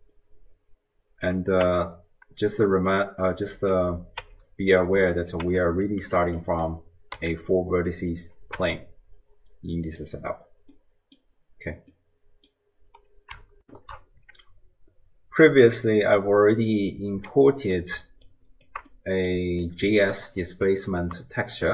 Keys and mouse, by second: 1.8 Tab, 3.1 middle click, 4.2 Tab, 5.5 Tab, 6.0 t, 6.4 click, 7.2 a, 8.6 Tab, 9.9 click, 10.9 middle click, 11.9 middle click, 13.6 ctrl+alt+shift+q, 18.4 shift+click, 18.9 middle click, 19.7 click, 20.4 drag, 20.9-21.3 ctrl+drag, 21.6 click.